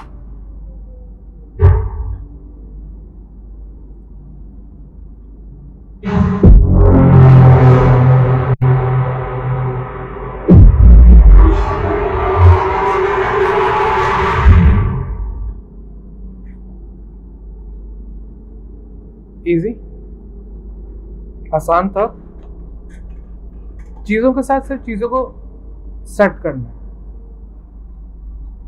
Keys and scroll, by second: 0.0 Return.